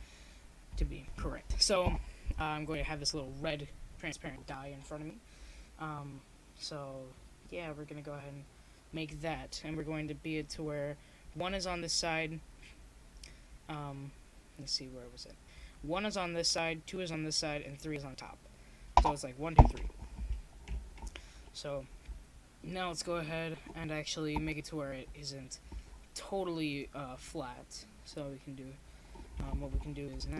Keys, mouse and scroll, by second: 2.0-26.9 middle drag, 26.9 Tab, 28.4 Tab.